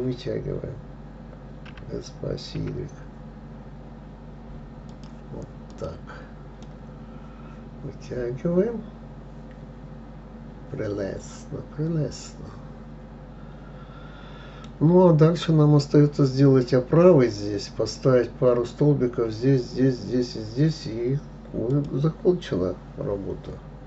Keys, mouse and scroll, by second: 2.1 s, 6.1 click, 7.0-10.1 middle drag.